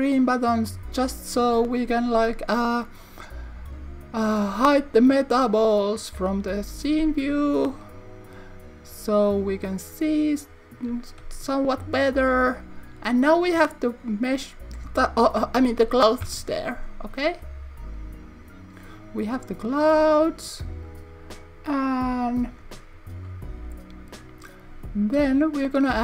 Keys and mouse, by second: 5.4 click, 16.2 KP_0.